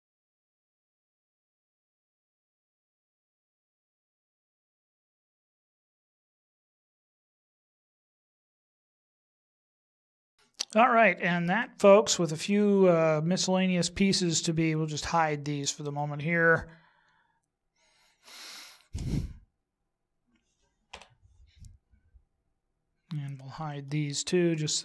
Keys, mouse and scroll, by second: 0.3 click, 0.7 click, 1.0 click, 1.3 click, 1.9 right click, 2.7 right click, 2.9 click, 3.5 click, 3.8 click, 4.5 click, 5.0 right click, 5.2 g, 6.0 click, 6.3 click, 6.8 right click, 7.1 right click, 7.2 click, 7.7 click, 7.8 click, 8.2 click, 8.8 click, 9.3 right click, 9.8 click, 10.2 x, 11.6 middle click, 14.0-14.9 scroll down 5, 17.1 right click, 19.7 shift+right click, 20.9 h, 22.1 scroll down 4, 24.1 right click.